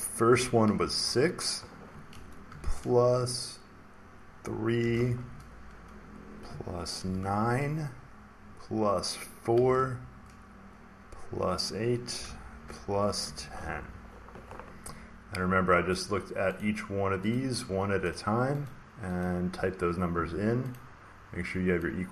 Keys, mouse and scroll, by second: 0.6 6, 4.7 3, 6.9 9, 9.5 4, 12.1 8, 13.1-13.5 typing, 14.8-15.5 typing, 15.9 click, 16.5 click, 17.3 click, 18.0 click, 18.6 click, 19.1 click, 20.6 click.